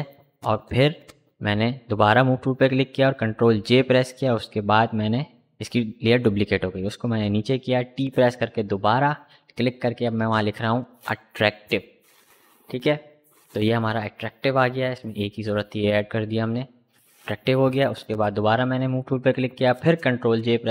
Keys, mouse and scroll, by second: 0.1 click, 2.2 ctrl+j, 4.7-6.3 drag, 6.3 t, 6.7 click, 6.9 ctrl+a, 7.7 shift+a, 8.2 shift+t, 8.8 shift+r, 10.5-12.7 typing, 13.8 click, 14.2 shift+a, 17.3 click, 18.5 ctrl+j, 19.2-20.7 drag.